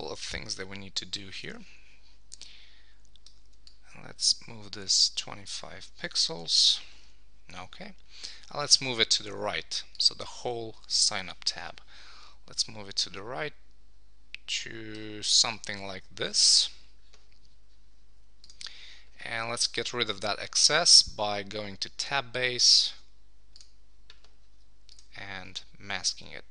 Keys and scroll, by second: 6.5 Left, 6.9 super+s, 10.5 super+s, 15.9 Right.